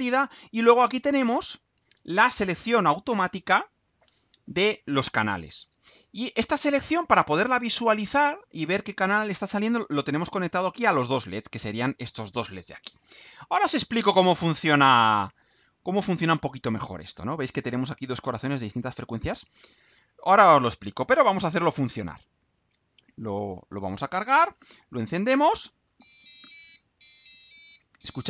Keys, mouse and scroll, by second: 22.3 ctrl+u.